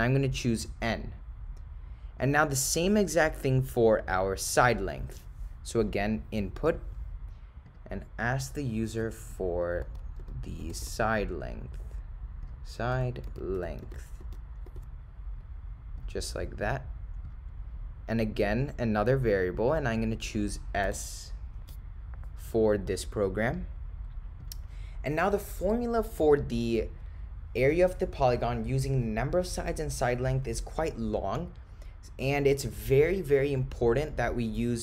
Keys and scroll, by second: 2.2 Return, 5.9 Right, 6.7 Return, 12.5 0, 13.0 ), 14.3 4, 14.7 ^, 16.0 ., 16.6 0, 19.4 ,, 24.4 Return.